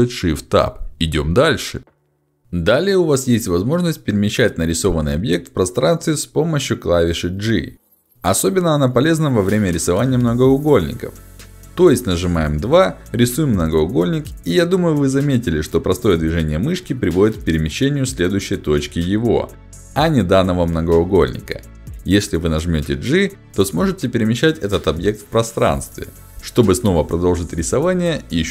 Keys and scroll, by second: 4.7 g, 11.7 2, 23.2 g.